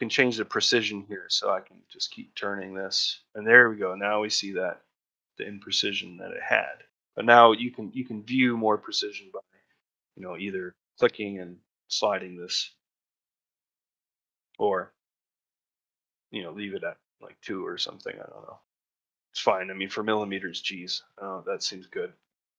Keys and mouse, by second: 1.7 click, 10.8-17.1 drag, 18.5 middle click, 19.0 shift+middle click.